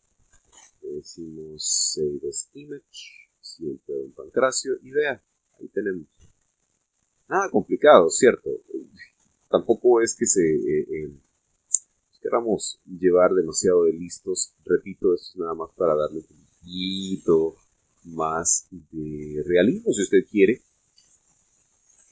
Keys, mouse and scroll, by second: 1.4 click, 3.4 click, 4.8 click, 5.8 scroll down 1, 6.1-7.8 middle drag, 8.1-8.6 scroll up 4, 9.3-9.9 scroll up 4, 10.0 scroll down 2, 11.0-12.0 middle drag, 15.0 click, 16.7 click, 17.4-18.6 drag.